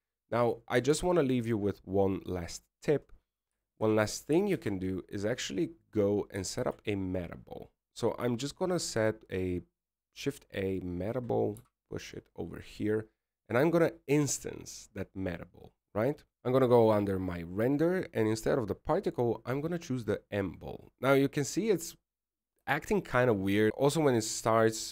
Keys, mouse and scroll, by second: 1.9 scroll up 1, 2.5 click, 3.0 alt+a, 4.2 click, 5.2-5.6 scroll down 4, 5.7 shift+middle click, 6.3 right click, 6.6 shift+s, 8.7 shift+a, 13.7 g, 15.5 right click, 16.3 click, 16.3 scroll down 10, 16.8 click, 17.1 click, 17.5 click, 20.3 click, 23.7 alt+a.